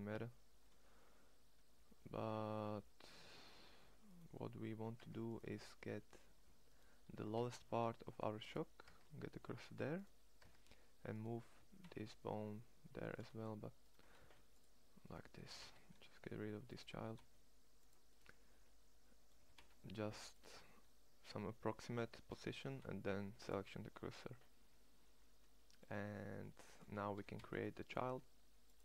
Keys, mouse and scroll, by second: 4.7 Tab, 5.6 Tab, 5.8-7.4 middle drag, 7.4 shift+s, 8.7 Tab, 9.7-10.8 middle drag, 10.2 Tab, 11.3 g, 13.9 x, 15.1 g, 16.7 g, 19.2 g, 20.8 middle click, 21.9 middle click, 22.5 shift+s, 26.3 middle click, 26.7 middle click, 26.9 e.